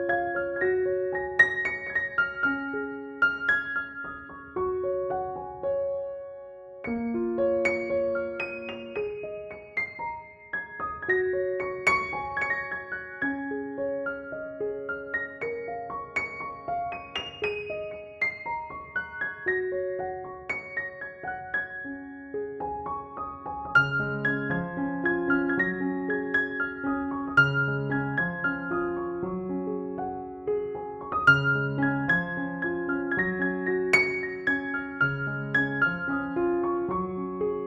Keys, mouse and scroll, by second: 3.9 ctrl+=, 4.7 b, 5.8 alt+click, 6.2 space, 6.3-6.8 click, 6.8 [, 7.2 [, 7.4-8.1 click, 8.1 ], 8.5 click, 9.9 ctrl+e, 10.7 ctrl+j, 11.5 alt+s, 12.8 click, 24.3 click, 29.9-31.0 typing, 32.0-33.5 drag.